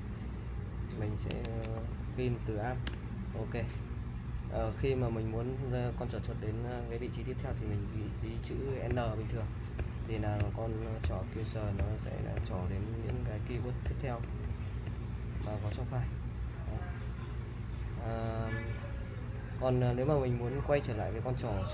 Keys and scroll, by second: 1.2-2.4 typing, 2.9 Return, 8.9-15.7 typing.